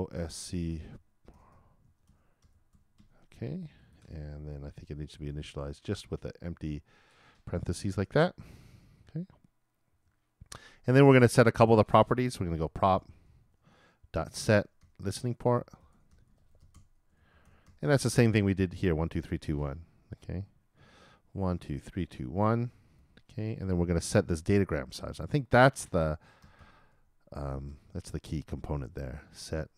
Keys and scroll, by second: 0.0-1.8 typing, 7.5-8.7 typing, 15.1-17.8 typing, 20.8-23.5 typing.